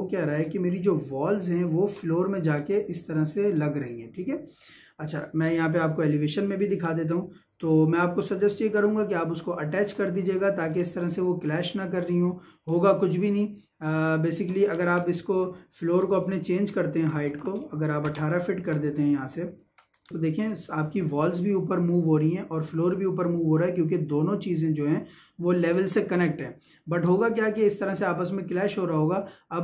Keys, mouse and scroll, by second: 0.7 scroll up 1, 1.7 click, 2.0 shift+middle click, 5.0 Escape, 5.6 click, 6.8-7.2 scroll up 1, 7.7 click, 8.2 shift+middle click, 9.5 click, 10.3-12.7 shift+middle drag, 13.8 click, 14.7 scroll down 1, 15.0 middle click, 16.0 click, 19.6 Escape, 20.1 Return, 25.8 click.